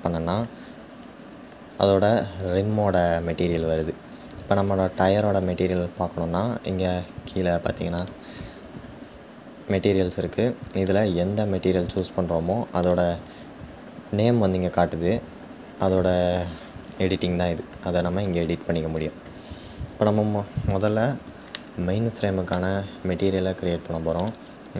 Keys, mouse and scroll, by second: 10.5 click, 11.5 click, 12.4 click, 21.3-22.7 shift+middle drag, 22.7-23.3 scroll up 4, 23.9 click.